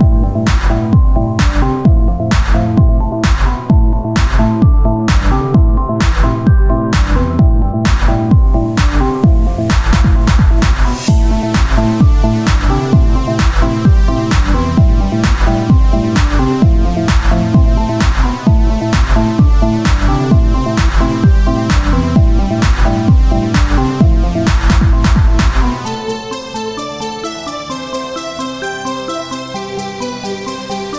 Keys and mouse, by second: 3.3 Tab, 6.1 KP_3, 6.9 z, 7.3 c, 8.3-9.9 drag, 9.9 r, 11.3-14.3 drag, 11.7 Tab, 16.4 KP_3, 18.6 Tab, 19.0-20.2 right drag, 19.3 z, 19.9 c, 22.1-24.0 drag, 23.0 r, 24.5-25.9 drag, 25.9 Tab, 26.2 z.